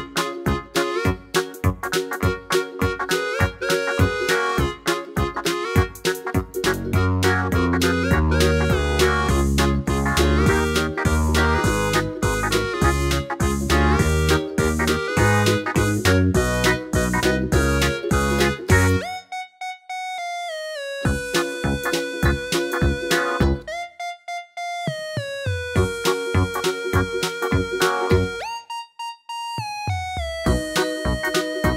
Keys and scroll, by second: 14.6 super+d, 28.4 super+d, 29.9 super+d, 30.0 super+d, 30.2 super+d.